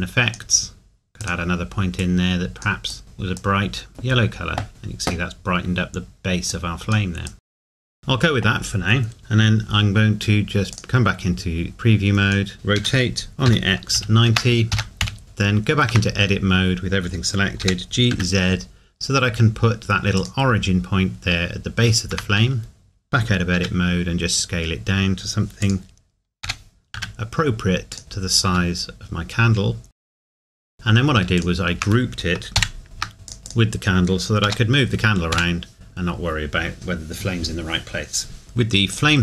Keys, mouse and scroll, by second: 5.7 scroll up 1, 7.6-8.0 scroll down 2, 7.8 middle click, 7.8 click, 8.0 middle click, 10.7 click, 12.5 scroll up 1, 12.8 r, 14.8 KP_Enter, 15.2 middle click, 15.9 Tab, 17.6 g, 20.2 click, 22.1 Tab, 23.6 s, 25.6 click, 26.4 g, 27.9 click, 28.0 scroll up 1, 28.4 s, 29.9 click, 30.0 scroll up 1, 30.1 scroll down 1, 30.2 shift+middle click, 30.2 g, 30.5 shift+click, 30.6 middle click, 30.6 ctrl+s, 31.4 shift+click, 34.5 g, 35.3 Escape, 38.4 click, 38.9 click.